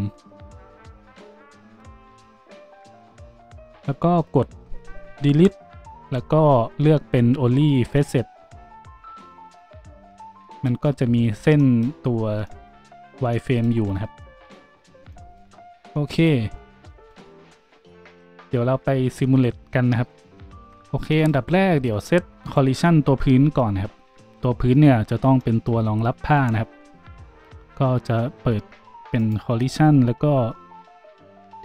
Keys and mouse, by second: 2.2 z, 5.3 Delete, 14.8 Tab, 20.4 shift+a, 21.1-22.4 drag, 22.4 middle click, 22.5-31.6 drag.